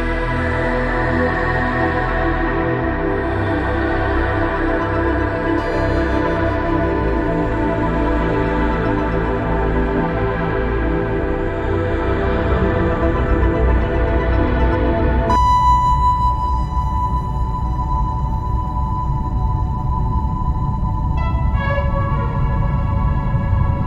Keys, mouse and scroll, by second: 0.2 click, 0.7 shift+a, 2.0 shift+middle click, 2.4 scroll up 4, 2.6 shift+middle click, 2.9 click, 3.5 click, 4.3 scroll down 4, 4.6 scroll up 1, 4.8 middle click, 6.3 click, 7.8 ctrl+s, 14.5 scroll down 2, 14.6-15.0 scroll up 2, 15.1 click, 17.8-18.4 scroll down 1, 19.0 middle click, 19.0-19.7 scroll up 2, 19.2 middle click, 19.5 middle click, 21.3-21.7 scroll down 2, 22.0 scroll up 2, 22.0 middle click.